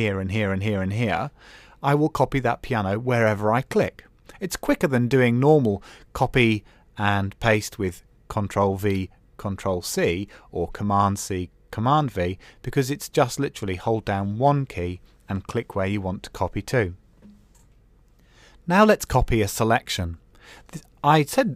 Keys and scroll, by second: 4.9 super+s.